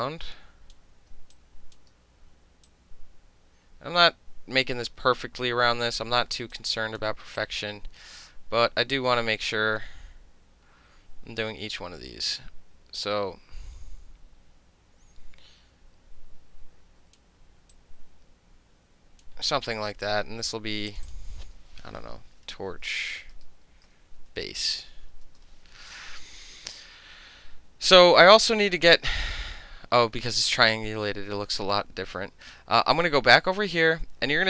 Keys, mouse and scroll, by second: 0.8 middle click, 1.1 space, 1.4 click, 2.7-6.0 drag, 6.5 space, 6.6 click, 7.4-17.2 drag, 17.8-19.3 drag, 20.9 click, 21.1 click, 22.6-25.7 typing, 33.0 click.